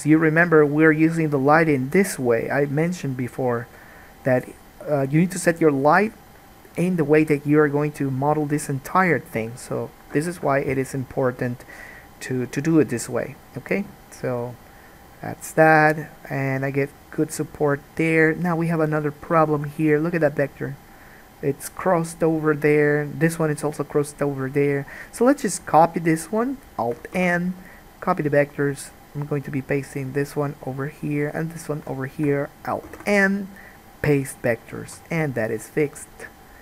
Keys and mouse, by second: 19.3-25.4 shift+middle drag, 25.4-27.1 drag, 27.1-30.1 alt+middle drag, 27.3 alt+n, 30.1 click, 30.2-31.7 middle drag, 31.7 shift+click, 31.8-36.6 shift+middle drag, 33.0 alt+n, 35.1 alt+a.